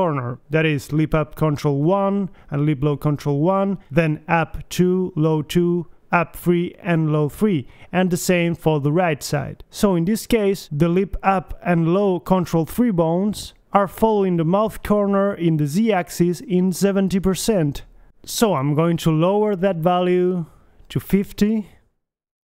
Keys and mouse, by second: 3.8-6.4 right drag, 7.8-9.2 right drag.